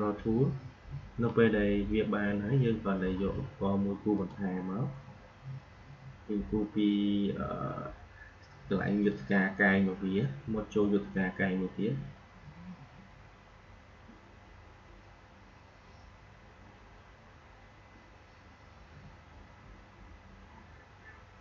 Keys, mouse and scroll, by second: 4.1 click, 9.0-19.0 drag.